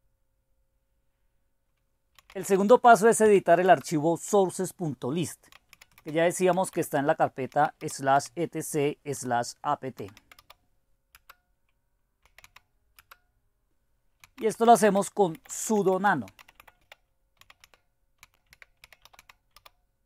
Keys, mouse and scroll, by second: 1.9-3.7 typing, 5.3-13.0 typing, 14.0-20.0 typing.